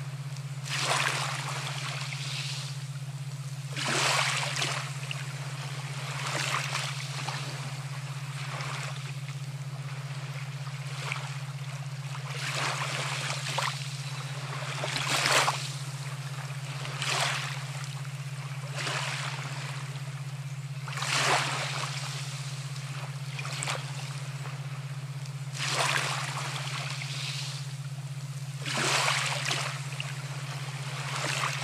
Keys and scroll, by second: 12.2-14.4 typing, 12.7 Caps_Lock, 15.3 ctrl+alt+shift+e.